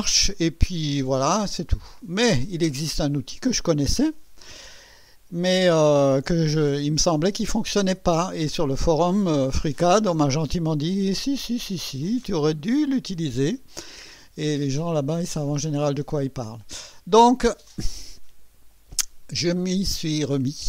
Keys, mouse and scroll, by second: 0.1 scroll down 1, 0.8-1.5 right drag, 2.2 click, 3.8 middle click, 15.6 right click, 17.6 click.